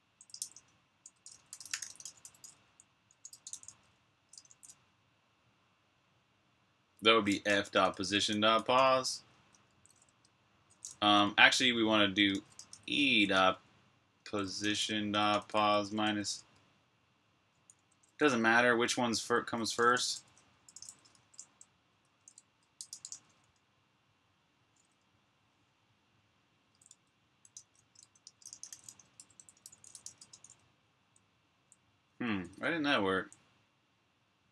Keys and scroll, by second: 0.0-1.2 typing, 3.5 typing, 5.9-9.5 typing, 10.8-13.4 typing, 14.5 typing, 17.5 ↻, 18.7-20.7 typing, 22.3-23.4 typing, 26.6-31.8 typing.